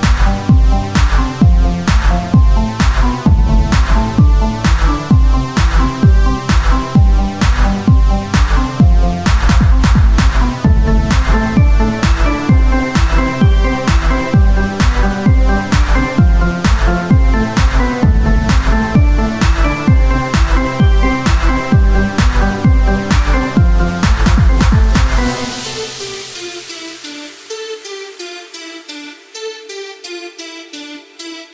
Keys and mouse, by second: 1.2 Tab, 2.4 Tab, 3.2 right click, 5.2-8.0 drag, 5.2 right click, 8.0-11.6 right drag, 11.1-17.9 drag, 15.7-17.9 right drag, 18.1-19.7 middle drag, 19.7 click, 22.7-24.6 drag, 24.1 Tab, 28.9 Tab, 29.5-31.5 drag, 29.5 z, 29.8 c, 30.7 z.